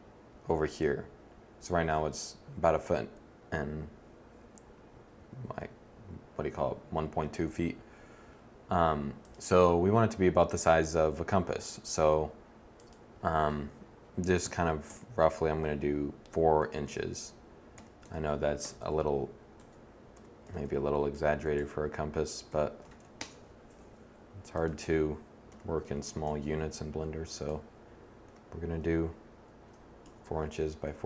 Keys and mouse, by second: 7.3 s, 18.6 BackSpace.